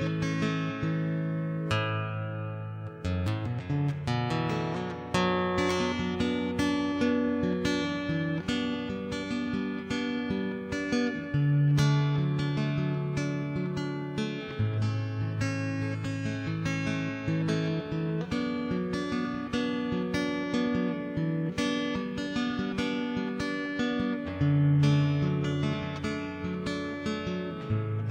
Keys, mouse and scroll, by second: 1.1 Tab, 2.0 ctrl+a, 2.7 Tab, 3.3 right click, 3.8 ctrl+Tab, 4.0 right click, 4.8 ., 5.5 ctrl+space, 5.9 click, 6.4 click, 6.7 middle click, 6.9 g, 7.1 middle click, 7.5 Tab, 7.7 ctrl+s, 8.7 e, 9.5 ctrl+s, 9.9 ctrl+3, 10.0 click, 10.4 middle click, 11.0 Tab, 11.3 ctrl+0, 11.5 click, 14.1 ctrl+b, 15.0 ctrl+3, 15.8 ctrl+s, 16.3 click, 17.3 middle click, 17.5 ctrl+s, 17.9 shift+space, 18.0 middle click, 18.8 ctrl+r, 19.1 middle click, 20.3 ctrl+Tab, 20.7 ctrl+Tab, 21.0 middle click, 21.2 middle click, 22.0 ctrl+Tab, 23.3 ctrl+Tab, 23.3 z, 23.3 middle click, 23.4 right click, 23.6 x, 23.8-24.8 middle drag, 25.0 middle click, 25.2 ctrl+Tab, 25.4 middle click, 25.9 middle click, 26.0-27.0 right drag, 26.5 middle click, 27.3 click, 27.7 middle click.